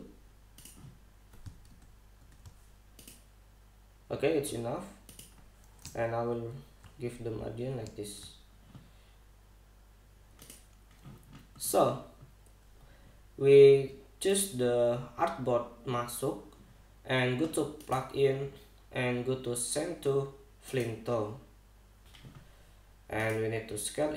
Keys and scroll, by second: 2.3 super+-, 7.0 shift+Down.